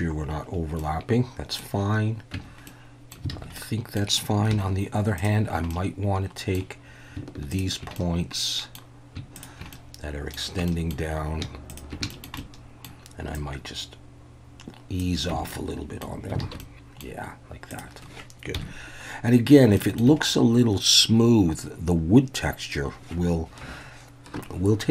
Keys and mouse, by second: 0.8-1.6 middle drag, 2.3 Tab, 2.7 middle click, 3.3 alt+a, 3.6 middle click, 4.5 1, 5.2 click, 5.7 middle click, 7.9 middle click, 9.4 shift+click, 9.7 middle click, 10.7 middle click, 11.7 shift+click, 12.1 shift+middle click, 12.4 shift+middle click, 13.3-15.0 drag, 15.3 Tab, 15.5-16.0 middle drag, 16.4 alt+a, 16.6-17.0 middle drag, 17.7 click, 18.5 KP_1, 19.8 shift+drag.